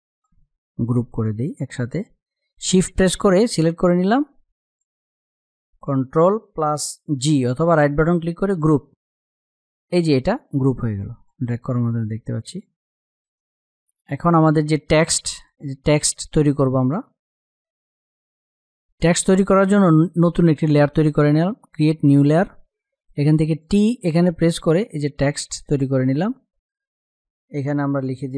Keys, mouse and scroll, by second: 7.3 right click, 8.1-11.6 drag, 11.6 ctrl+z, 12.5 click, 12.8 space, 13.0 click, 13.3 space, 23.1 click.